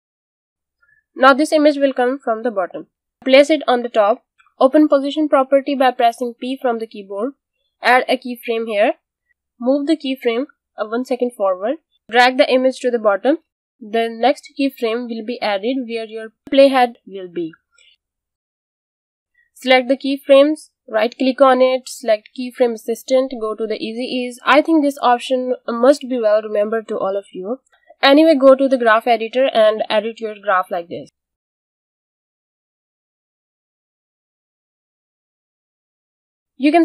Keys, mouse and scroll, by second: 6.0 p, 7.8 click, 12.3 click, 17.7 click, 18.1 space, 20.6 click, 21.6 right click, 23.1 click, 33.2 space, 34.2 click, 35.4 space.